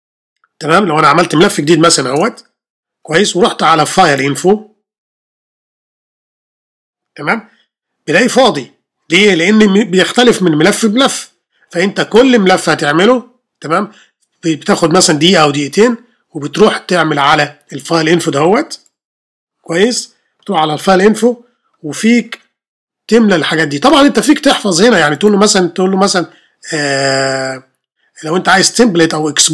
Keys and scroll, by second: 1.7 super+n, 2.1 super+Return.